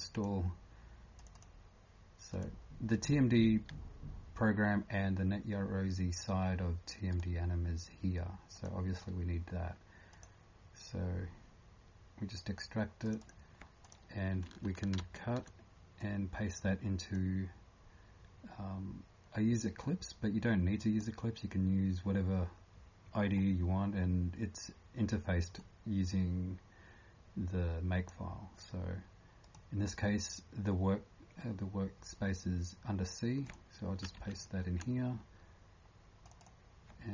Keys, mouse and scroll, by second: 1.3 click, 8.5 click, 15.0 ctrl+x, 23.2 scroll up 2, 24.1 scroll up 2, 25.6 click, 29.6 typing, 34.1 ctrl+v.